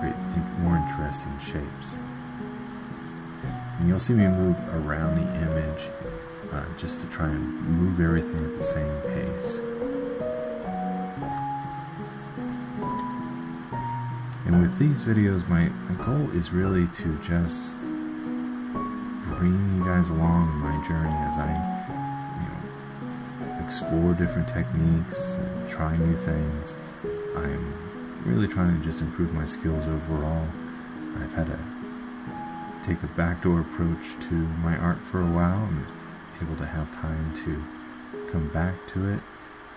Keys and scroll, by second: 13.5 ctrl+z.